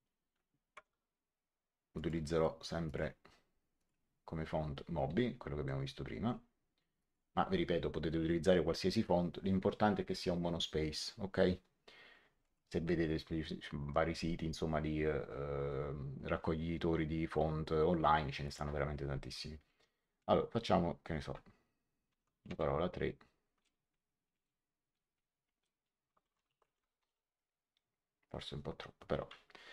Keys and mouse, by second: 0.0-0.7 typing, 1.9 click, 5.6 middle click, 6.9 click, 12.4 click, 18.4 click, 21.8-22.9 typing, 25.4 Return, 25.4 KP_Enter, 25.9-27.5 typing.